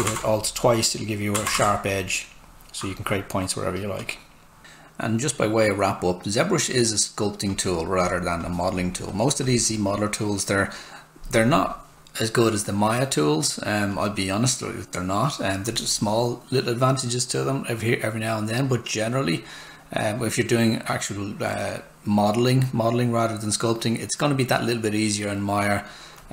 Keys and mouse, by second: 7.5 click, 13.9 click, 26.2 click.